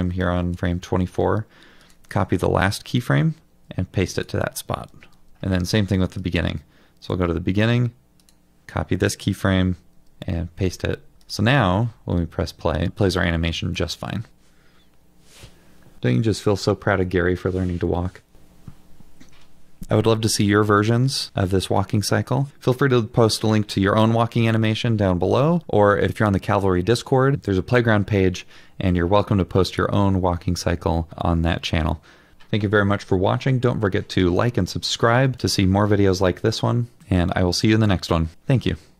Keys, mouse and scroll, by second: 3.0 typing, 9.5 typing, 11.4 typing.